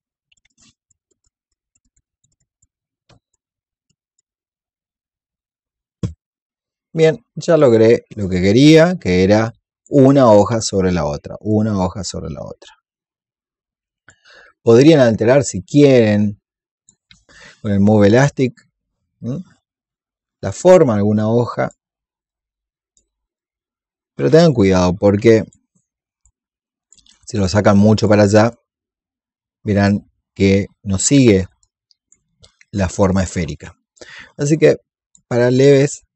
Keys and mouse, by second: 0.2 click, 0.6 click, 1.0 alt+click, 1.5 click, 3.1 click, 20.5 click, 22.4-31.4 drag, 31.5 click, 33.3 ctrl+z, 33.8-36.1 drag.